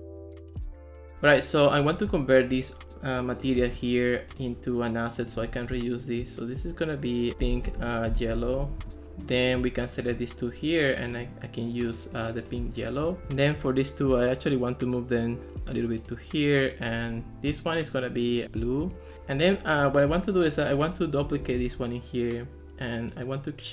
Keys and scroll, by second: 0.8 super+d, 7.1-9.1 typing, 21.5 super+d.